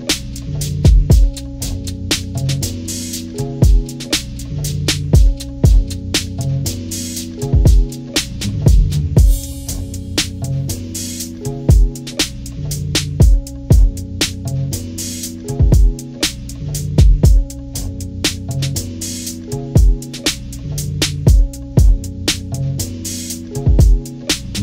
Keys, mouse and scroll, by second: 0.6-1.6 drag, 1.6 ctrl+-, 2.0 ctrl+-, 2.3 ctrl+=, 2.8 click, 2.9 click, 3.2 ctrl+-, 3.5-5.3 drag, 5.3 ctrl+-, 5.7 ctrl+=, 5.7 ctrl+scroll down 2, 5.9-7.0 drag, 7.2 ctrl+-, 7.4 ctrl+=, 7.6 click, 8.5 scroll down 2, 9.2-10.3 drag, 10.5-12.0 drag, 12.1 ctrl+-, 12.5 scroll down 2, 12.5 =, 13.0 click, 14.0 scroll down 2, 14.3-16.4 drag, 16.8 ctrl+=, 17.1-18.1 drag, 18.3 ctrl+-, 18.5 ctrl+=, 18.5 ctrl+scroll up 1, 18.7 click, 19.5 ctrl+-, 19.7 scroll up 2, 20.0 ctrl+-, 20.6 ctrl+=, 21.7 click, 22.0 click, 22.1 click, 22.3 click, 23.0 scroll down 1, 23.4 click, 23.6 ctrl+-, 24.0-24.6 drag.